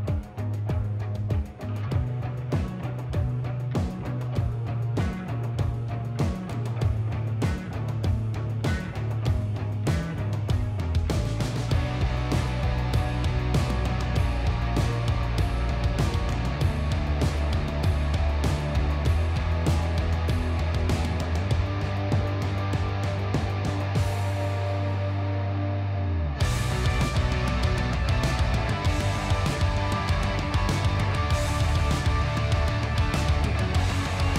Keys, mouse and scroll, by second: 2.1 click, 5.5 r, 5.8 y, 8.4 click, 8.8 ctrl+z, 9.7 ctrl+r, 10.3 ctrl+x, 12.3 click, 12.9 s, 16.4-16.8 typing, 22.0 click, 24.5 KP_1, 26.2-26.5 typing, 30.1 click, 31.1 typing, 34.2 alt+a.